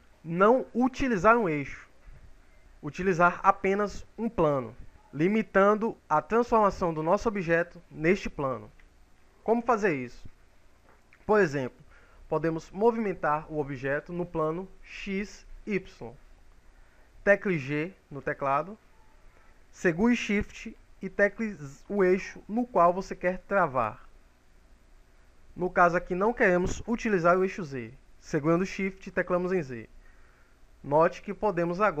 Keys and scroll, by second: 17.7 g, 27.6 shift+z.